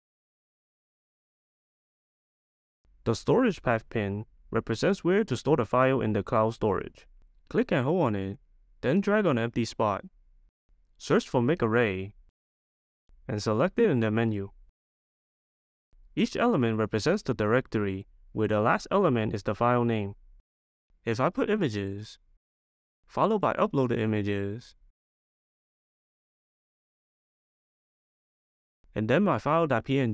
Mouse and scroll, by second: 1.7 click, 3.7 click, 14.5-17.5 drag, 17.6-24.1 drag, 25.0-30.1 drag.